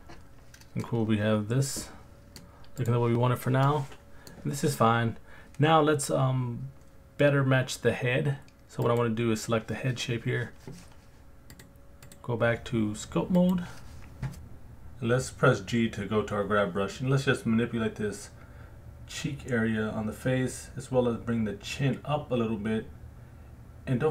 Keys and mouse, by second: 0.8-2.3 middle drag, 2.8-3.2 drag, 3.6-4.3 middle drag, 8.8 click, 11.5 click, 12.0-13.6 drag, 15.7 alt+shift+click, 16.2 alt+middle click, 17.3 g, 17.5 f, 17.9 alt+middle click, 19.1-20.5 drag, 20.6 alt+middle click, 21.2 alt+middle click, 21.2 alt+click, 21.8 click, 22.8 alt+click, 23.5 alt+middle click.